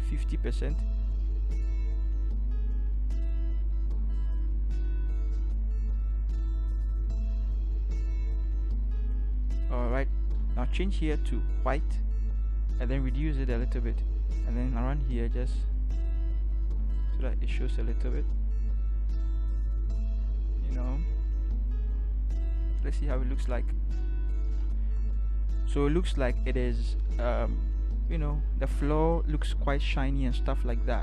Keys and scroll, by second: 13.0 [, 13.2 [, 13.3 [, 22.9 ctrl+0.